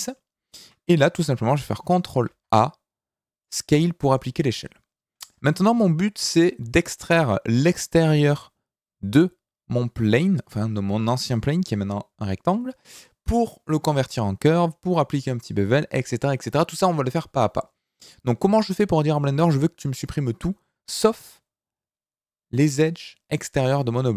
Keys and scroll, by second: 2.2 ctrl+a.